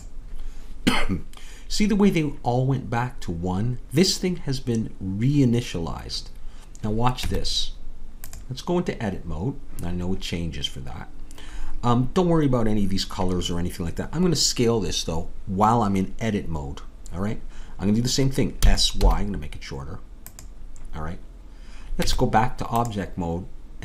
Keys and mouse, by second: 7.3 Tab, 18.6 s, 22.0 Tab.